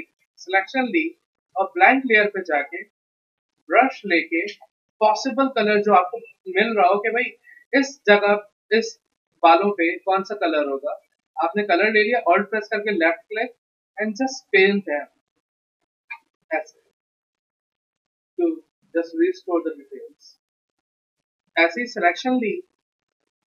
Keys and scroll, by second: 16.5 ctrl+d.